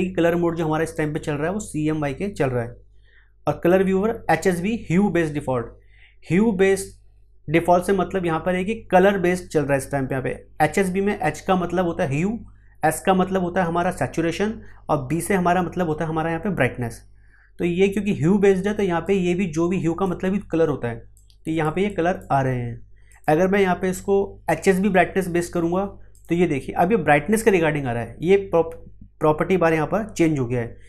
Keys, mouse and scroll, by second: 0.5-19.0 drag, 19.0-21.8 drag, 27.7 click.